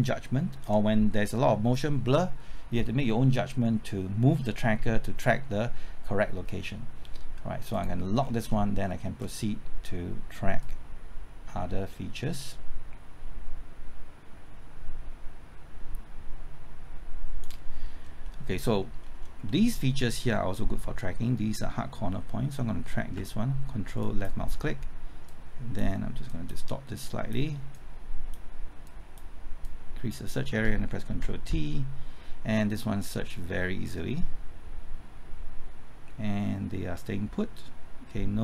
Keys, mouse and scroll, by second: 8.2 scroll down 1, 8.9 middle click, 10.6-17.5 drag, 17.9-18.3 scroll up 1, 18.3 middle click, 19.0-19.5 scroll up 1, 19.5 middle click, 20.0-23.2 scroll up 1, 24.0 ctrl+click, 25.3 click, 31.1 ctrl+t, 33.0-38.4 drag.